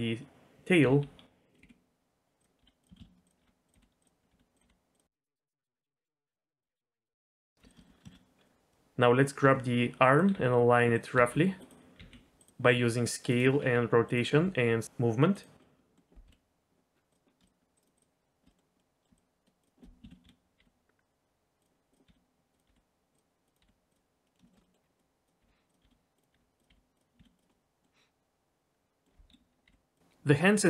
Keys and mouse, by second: 0.8-4.6 typing, 6.4-7.6 typing, 6.9 click, 7.5 click, 7.8 middle click, 8.1 middle click, 8.4 click, 8.7-12.5 typing, 13.6 r, 14.3 g, 15.6 middle click, 16.2 KP_1, 17.1 click, 17.5 shift+click, 18.5 middle click, 18.7 middle click, 19.2 shift+click, 20.0 ctrl+z, 20.2 KP_3, 20.6 g, 22.0 s, 22.6 g, 23.4 click, 23.7 g, 24.3 middle click, 24.5 shift+middle click, 24.6 middle click, 25.0 click, 25.4-27.2 typing, 27.5 middle click, 28.6 click, 29.3 KP_3, 29.6 g.